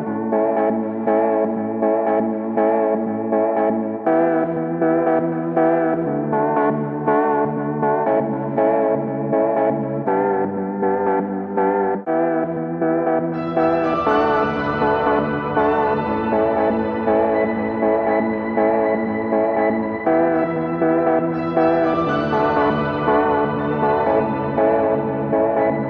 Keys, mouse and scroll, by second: 0.0-1.0 drag, 2.0 alt+click, 2.5-3.7 middle drag, 2.5-3.7 scroll up 14, 4.9 click, 6.8 click, 6.9-7.9 middle drag, 6.9-7.9 scroll up 6, 8.0 middle click, 8.0-8.7 scroll up 1, 8.9-10.1 alt+drag, 11.6 alt+click, 14.0 click, 14.8-15.3 scroll down 4, 15.3-18.0 scroll down 20, 18.0-19.1 scroll up 4, 21.5 click, 22.1-22.9 scroll up 11, 22.9-24.5 scroll down 16, 25.4 ctrl+z, 25.4 alt+click.